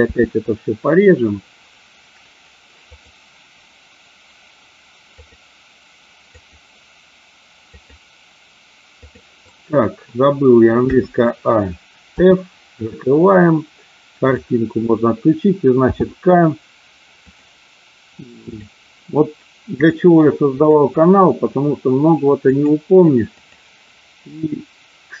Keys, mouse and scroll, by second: 10.8 a, 12.1 f, 14.2 click, 15.7 k.